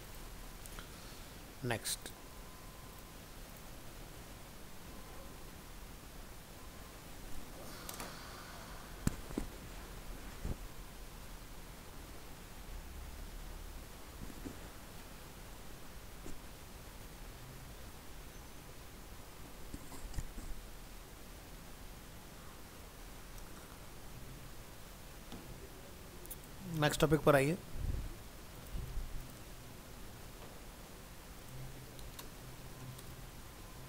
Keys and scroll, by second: 4.1 ctrl+s, 27.7 ctrl+s.